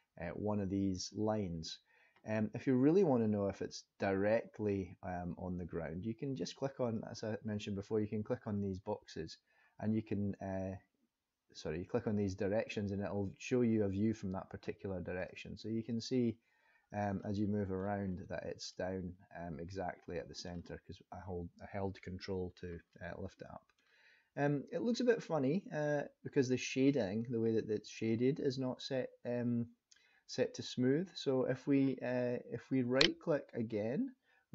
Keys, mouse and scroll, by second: 6.9 click, 15.1 click, 15.8 click, 17.1 middle click, 18.0-18.7 scroll up 3, 18.7 middle click, 22.9 middle click, 32.9 right click.